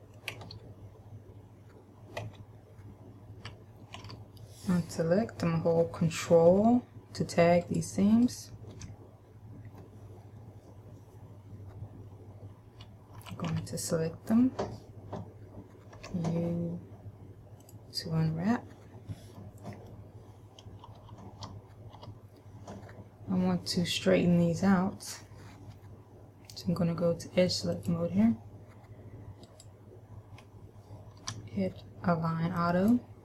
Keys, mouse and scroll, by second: 0.6 ctrl+KP_1, 2.4 KP_Decimal, 4.2 a, 7.8 ctrl+right click, 8.3 ctrl+right click, 13.3 a, 13.7 a, 16.2 u, 19.5 middle click, 21.1 KP_Add, 22.2 KP_Add, 23.2-23.7 scroll down 1, 28.0 click, 29.6 right click, 31.3 w.